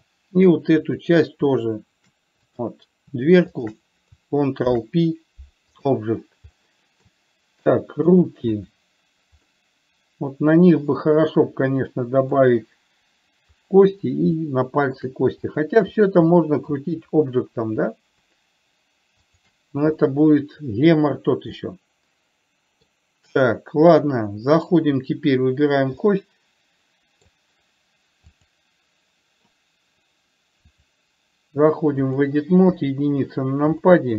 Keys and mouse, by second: 1.2 click, 2.8 click, 4.9 ctrl+p, 6.9-7.5 middle drag, 8.0-8.4 middle drag, 8.9 click, 9.9-12.7 middle drag, 14.8-15.3 shift+middle drag, 15.8 click, 16.8 middle drag, 19.5 shift+click, 20.4-21.0 middle drag, 22.0-23.3 middle drag, 26.3-27.5 middle drag, 31.3-32.7 drag, 33.0 KP_1.